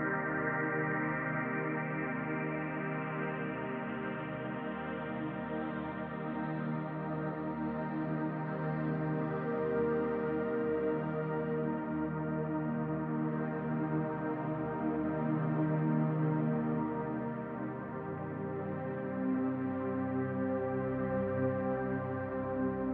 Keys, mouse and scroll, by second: 2.0 click, 3.0 click, 5.3 click, 6.3 click, 15.0-16.3 scroll down 2, 16.3 click, 22.0 middle click.